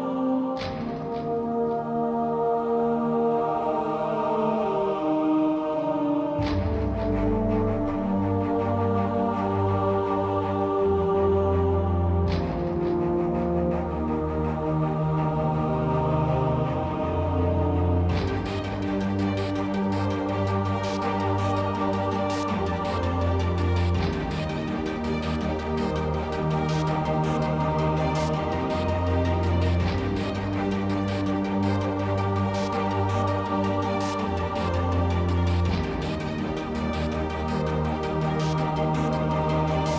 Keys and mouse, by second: 0.0-2.0 typing, 2.5 Tab, 3.8 Tab, 4.9 KP_Decimal, 6.3 ctrl+r, 6.4 Tab, 7.2 a, 7.4 KP_7, 7.7 z, 8.3 Tab, 8.5 Tab, 8.8 Tab, 8.9 z, 9.2 z, 9.5 k, 11.5 k, 12.9 z, 13.5 z, 14.3 z, 15.3 z, 16.0-16.6 middle drag, 16.6 KP_7, 17.2-18.3 ctrl+drag, 18.3-19.6 typing, 20.7 ctrl+z, 20.8 ctrl+z, 21.0 ctrl+z, 21.9 ctrl+z, 22.0 x, 23.3 g, 24.1 g, 24.5 ctrl+z, 24.9 g, 25.3-25.8 drag, 26.2 drag, 26.3-29.1 typing, 30.1 Tab, 30.3 Tab, 30.9 ctrl+Tab, 31.3 drag, 31.9 ctrl+b, 33.6 Tab, 34.2 Tab, 34.3 Tab, 34.5 a, 34.8 KP_7, 35.3 shift+c, 36.5 z, 36.7 z, 36.8 shift+a, 37.2 Tab, 37.7 ctrl+r, 38.1 click, 38.4-39.9 typing, 39.6 Tab.